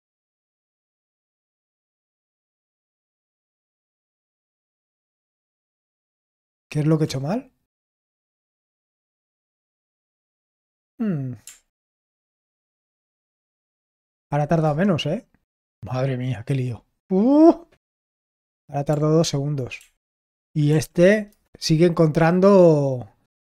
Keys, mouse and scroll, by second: 0.9 ctrl+p, 6.5 ctrl+p, 8.0 Return, 12.2 ctrl+p, 12.8 ctrl+p, 14.2 ctrl+n, 14.6 Return, 20.0 ctrl+p, 20.7 ctrl+p, 21.3 Return.